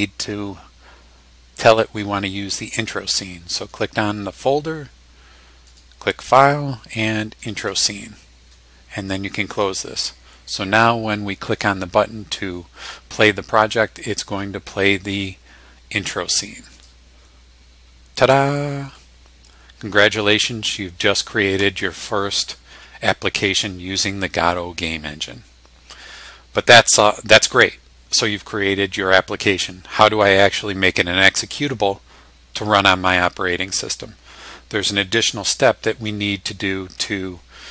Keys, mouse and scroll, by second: 3.7 click, 5.7 click, 7.4 click, 9.5 click, 16.7 click, 18.9-20.9 drag.